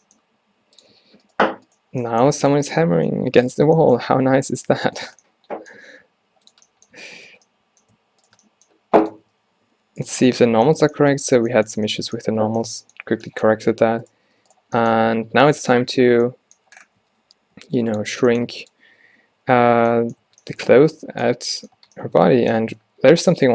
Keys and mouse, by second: 0.3 g, 2.4 g, 3.3 g, 4.5 z, 5.2 z, 6.0 g, 8.9 g, 9.2 a, 9.4 a, 10.1 ctrl+n, 11.1 Tab, 13.7 Tab, 17.1 s, 18.2 g, 19.1 a, 19.3 a, 20.5 a, 21.9 Tab.